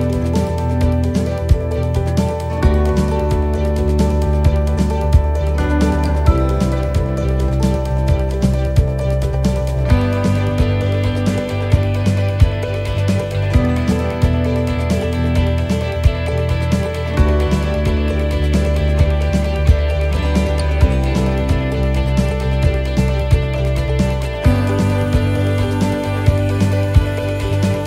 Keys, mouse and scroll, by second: 0.1 c, 3.0 s, 7.3 click, 12.4-13.3 scroll down 3, 13.3-14.8 scroll up 2, 15.2 g.